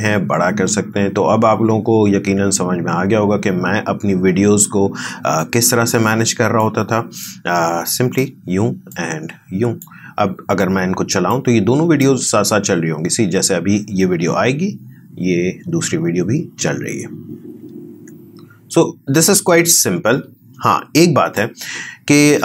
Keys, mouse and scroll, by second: 12.1 space, 19.5-22.4 drag.